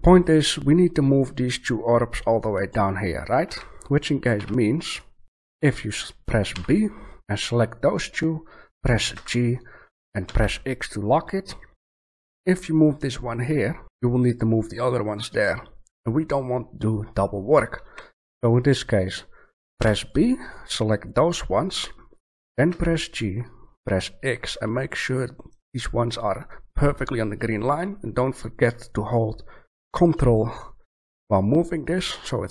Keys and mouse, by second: 2.2-3.4 middle drag, 3.4 a, 4.3 b, 6.5 b, 9.1 g, 13.5 middle click, 17.8 a, 19.7 b, 21.5-22.5 middle drag, 22.6 g, 24.1-26.1 middle drag, 27.7-29.6 drag.